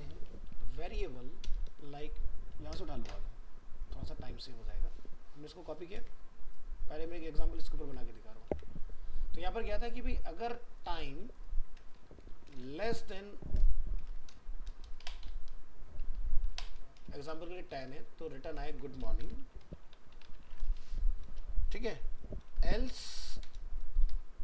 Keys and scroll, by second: 5.9 ctrl+c, 7.8 ctrl+v, 8.5 ctrl+s, 18.6 ctrl+shift+Left.